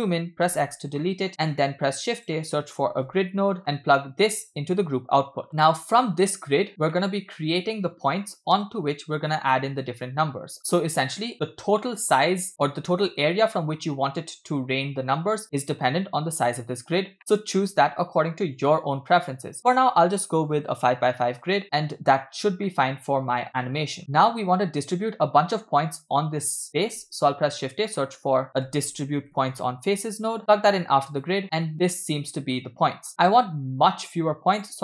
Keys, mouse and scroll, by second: 0.5 x, 1.0-1.3 middle drag, 1.6 shift+a, 4.3-5.5 drag, 5.5-6.0 middle drag, 6.0 scroll up 1, 7.0-7.5 middle drag, 10.6 click, 12.5-13.0 middle drag, 15.6 middle click, 15.8-17.1 scroll up 2, 17.2 middle click, 17.3 scroll up 1, 19.6-20.6 shift+drag, 22.7-23.7 middle drag, 24.0 scroll down 5, 27.0 shift+a, 31.4-32.7 middle drag, 33.1-33.6 scroll up 3, 34.5-34.8 drag.